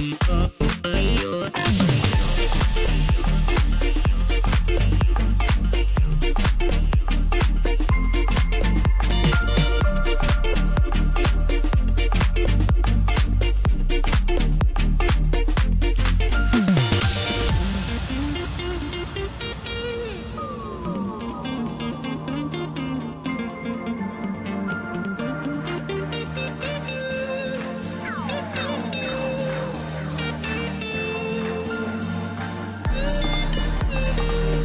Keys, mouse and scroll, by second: 3.8-6.9 drag, 7.2-7.6 scroll up 2, 7.6-10.7 middle drag, 15.3 KP_7, 16.5 click, 17.1-18.5 scroll up 2, 18.5 click, 19.5 g, 22.8-24.8 middle drag, 24.8-26.1 scroll down 3, 26.1 drag, 27.1 KP_7, 28.5 click, 29.8 click, 30.5-32.3 middle drag, 32.3 shift+d.